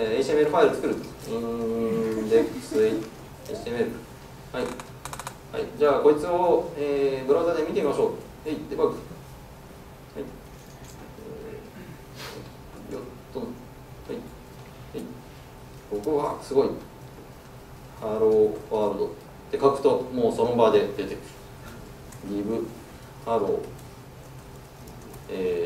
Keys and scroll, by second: 8.9 ctrl+shift+F9, 16.2 ctrl+shift+super+F12, 23.7 Tab, 24.7 Tab.